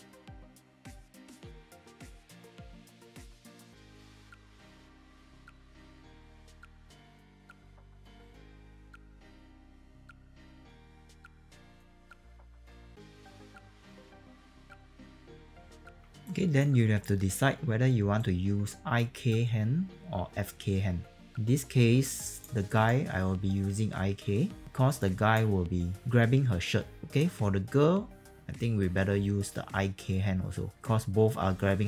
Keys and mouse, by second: 0.1 alt+click, 0.4 click, 0.5 middle click, 0.8 alt+click, 1.4-4.9 typing, 1.4 alt+click, 1.7 click, 2.0 alt+click, 2.1 click, 2.4 alt+right click, 2.7 alt+middle click, 2.9 alt+click, 3.4 middle click, 3.7 click, 4.3 click, 4.6 click, 4.9 middle click, 5.0 click, 5.5 alt+click, 6.3 click, 6.4 middle click, 6.7 alt+click, 7.0-9.4 typing, 7.3 click, 7.5 click, 7.7 click, 8.0 click, 8.2 click, 8.5 click, 8.7 click, 8.9 click, 9.7 alt+right click, 9.9 alt+click, 10.4 alt+click, 10.5-14.6 typing, 10.6 click, 10.7 click, 11.6 click, 11.9 click, 12.1 click, 12.5 click, 12.7 click, 13.1 alt+click, 13.4 alt+right click, 13.4 alt+middle click, 13.8 click, 13.9 click, 14.2 alt+click, 14.3 alt+right click, 15.3 alt+click, 15.5 click, 15.7 e, 15.8 click, 16.2 alt+right click, 18.1 alt+right click, 18.9 alt+middle click, 22.0 alt+click, 22.6 alt+right click, 24.6 click, 27.1 click.